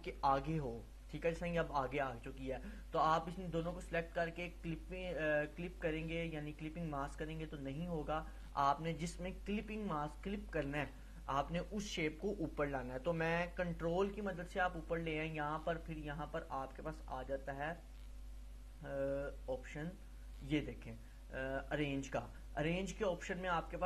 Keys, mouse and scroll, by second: 0.6 ctrl+[, 2.8-3.4 click, 3.9 right click, 4.7 click, 11.3 click, 15.1 right click.